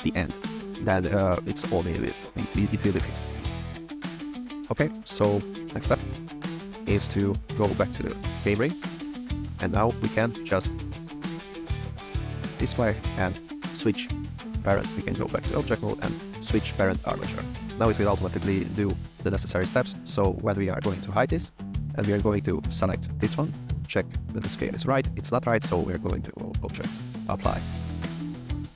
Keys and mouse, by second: 4.0 click, 4.6 click, 5.1 click, 6.2 n, 7.0 n, 8.0-9.0 shift+middle drag, 9.1 shift+middle click, 10.3 shift+middle drag, 11.4 click, 12.9 click, 14.6 click, 16.7 click, 20.7 click, 22.2 shift+middle click, 25.8-28.7 drag.